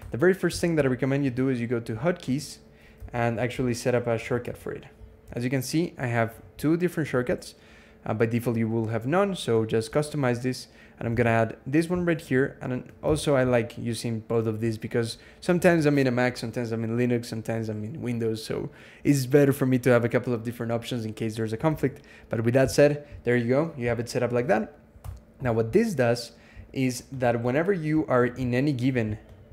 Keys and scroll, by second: 2.6-4.5 typing, 10.9 alt+x, 12.9 ctrl+x, 21.7 super+s, 24.9 Escape.